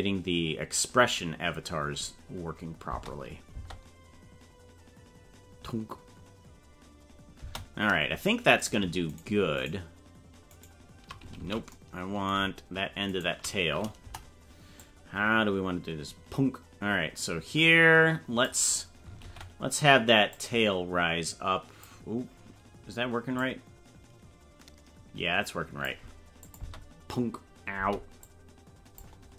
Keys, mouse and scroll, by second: 2.9 space, 3.5 space, 7.5 space, 8.7 right click, 9.9 shift+right click, 10.7 shift+right click, 11.4 ctrl+z, 13.2 shift+right click, 14.0 KP_0, 14.8-18.5 drag, 19.2 alt+r, 20.3-21.8 drag, 23.5-26.1 drag, 26.5 click, 26.6 space, 27.8 space, 28.2 click.